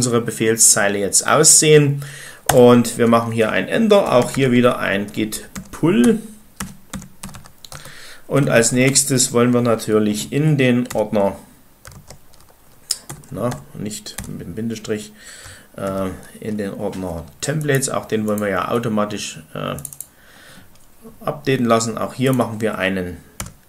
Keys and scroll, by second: 1.1 typing, 2.4 Return, 3.7-8.9 typing, 7.6 Return, 10.7 -, 13.0 BackSpace, 13.4 BackSpace, 14.2 ., 23.2 ..